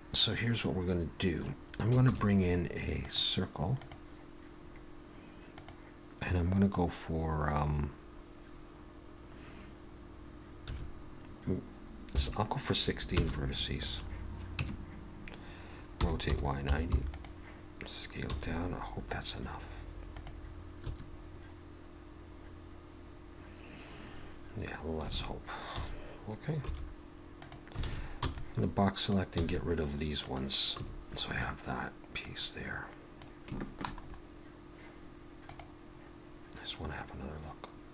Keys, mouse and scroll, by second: 0.2 click, 2.0 shift+a, 5.6 click, 14.6 Tab, 16.0 r, 18.3 s, 20.8 1, 21.2-21.9 scroll up 3, 25.2 alt+a, 25.7 a, 26.7 s, 27.8 alt+a, 28.2 b, 29.3 x, 30.8 a, 31.1-32.2 scroll down 1, 32.2 click, 32.2-33.2 scroll down 1, 33.6 shift+middle click, 34.1-34.7 scroll up 1, 34.7-35.3 scroll up 1.